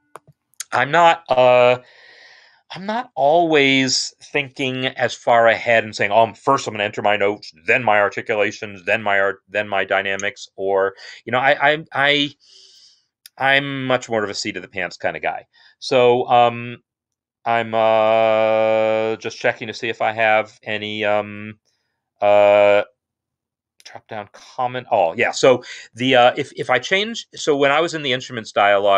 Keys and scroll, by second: 27.8 i.